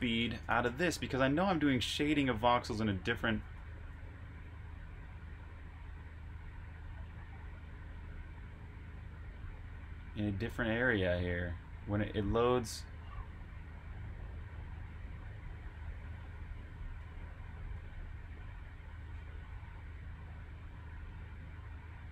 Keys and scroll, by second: 0.0-2.9 typing, 4.0-4.7 typing, 11.6-13.0 typing, 17.2-17.6 typing, 18.7-19.5 typing, 21.4 typing.